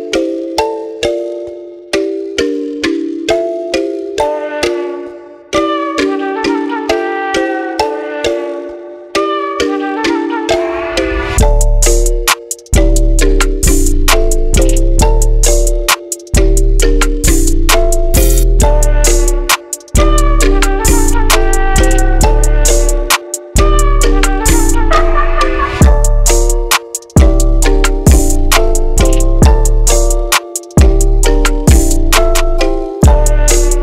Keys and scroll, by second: 0.3 Return, 20.7 typing, 24.3-25.0 typing.